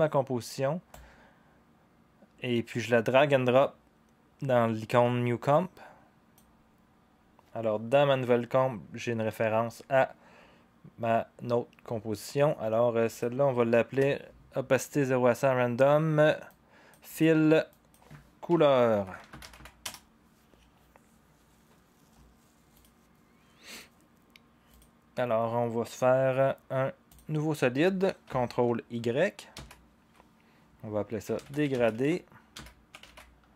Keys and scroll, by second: 13.9 Return, 18.2-20.0 typing, 23.7 typing, 29.5 ctrl+y, 31.0-33.5 typing.